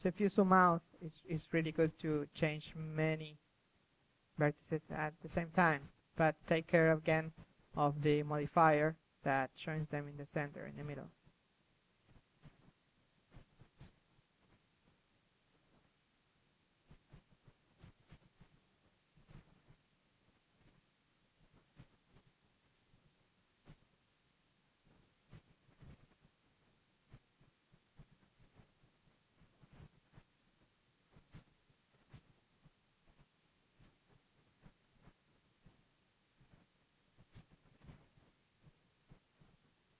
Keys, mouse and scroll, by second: 0.0 ctrl+z, 0.2 ctrl+z, 0.3 ctrl+z, 0.5-3.0 drag, 3.0-3.7 middle drag, 3.7 KP_3, 4.1-9.4 drag, 7.8 f, 11.5 s, 12.0 g, 12.3-13.0 drag, 12.7 KP_3, 12.9 ctrl+KP_1, 14.2 KP_3, 15.2-15.6 drag, 15.6-18.4 typing, 18.7-19.6 drag, 20.4-21.7 drag, 20.8 KP_3, 21.7 ctrl+z, 22.2 click, 22.8 click, 23.6 KP_3, 24.2 s, 24.6 g, 25.2 f, 26.0 click, 27.2-28.4 drag, 28.4 KP_3, 31.2-32.0 middle drag, 32.0 KP_1, 33.3-33.9 middle drag, 34.4 KP_3, 34.9-35.9 middle drag, 37.9-38.7 middle drag, 38.2 KP_1, 39.1 click, 39.8 KP_3.